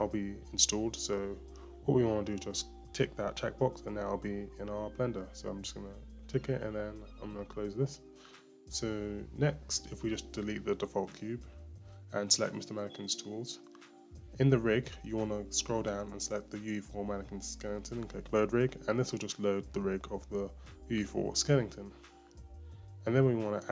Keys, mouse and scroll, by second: 9.9 click, 11.2 click, 12.1 Delete, 14.2-14.6 scroll down 2, 15.7 click, 17.7-18.8 drag, 19.5-20.7 drag, 20.7-22.0 scroll up 6, 22.0-23.3 shift+middle drag, 23.3 click.